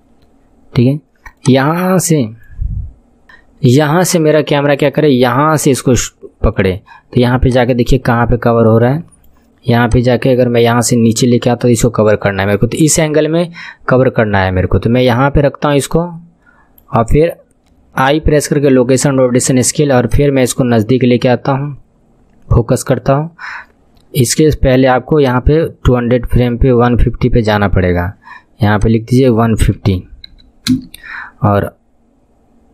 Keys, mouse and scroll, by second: 0.3 scroll down 5, 1.4 click, 4.1 click, 7.5-9.9 drag, 18.3 i, 19.1 i, 20.1-23.1 drag, 25.3-28.3 drag, 28.8-32.7 drag.